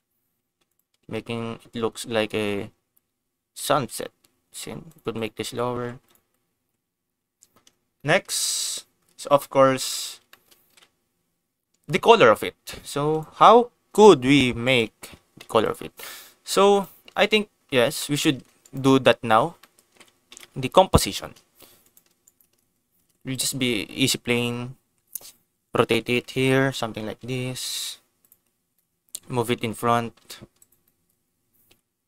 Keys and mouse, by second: 2.4 click, 3.6 g, 3.7 z, 4.8 click, 5.1 click, 5.4 Tab, 5.7 Tab, 6.0 click, 6.5 ctrl+s, 7.9 shift+middle click, 8.1 click, 8.5 ctrl+s, 10.2 shift+click, 10.6 ctrl+s, 13.1 click, 13.9 g, 14.6 click, 15.0 g, 15.1 z, 15.6 click, 16.6 click, 17.0 ctrl+s, 17.9 shift+middle click, 18.6 shift+click, 19.5 middle click, 19.8 ctrl+s, 20.2 KP_0, 21.8 click, 22.2 shift+click, 23.0 shift+a, 25.4 r, 25.7 x, 25.7 9, 25.8 0, 26.1 Return, 26.8 g, 26.9 y, 28.1 click, 28.7 middle click, 29.7 g, 30.1 y, 30.5 click, 30.8 middle click, 31.6 KP_0.